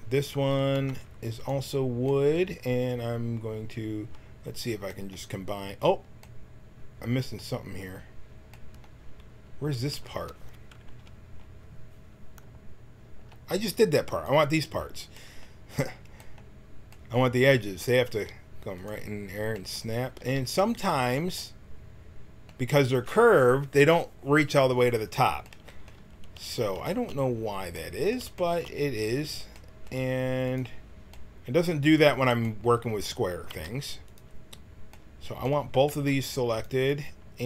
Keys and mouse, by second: 0.7 b, 4.2-8.7 middle drag, 9.9 a, 14.0-18.1 right drag, 18.1 g, 20.2 g, 25.2-27.9 middle drag, 27.9 click, 30.6-33.4 right drag, 33.4 g, 35.8 c.